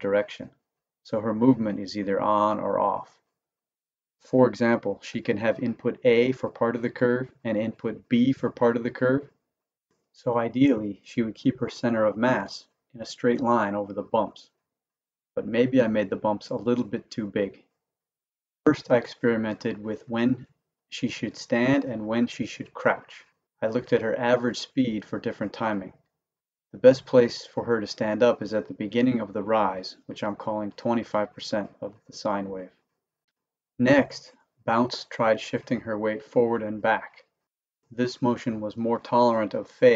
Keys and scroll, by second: 0.1 Down, 3.6 Up, 9.7 Down, 18.2 Down, 19.5 Up, 19.8 Down, 20.9 Up, 21.4 Down, 22.4 Up, 22.9 Down, 24.1 Up, 24.5 Down, 25.6 Up, 26.0 Down, 27.1 Up, 33.2 Left, 33.6 Right, 33.7 Left, 34.5 Right, 35.2 Left, 36.1 Right, 36.6 Left, 37.6 Right, 38.2 Left, 39.1 Right, 39.7 Left.